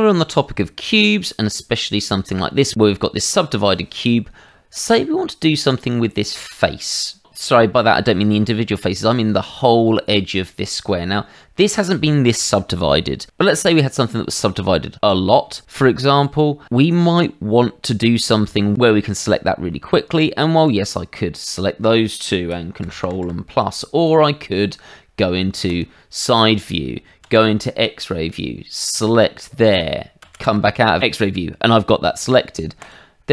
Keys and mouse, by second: 0.9 Tab, 4.5 middle click, 10.6 middle click, 15.9 middle click, 19.7 middle click, 20.6 click, 22.8 ctrl+KP_Add, 23.0 ctrl+KP_Add, 23.2 ctrl+KP_Add, 24.0 click, 25.6 click, 27.2 shift+z, 28.3 click, 30.2 shift+z, 30.6 middle click, 32.8 click.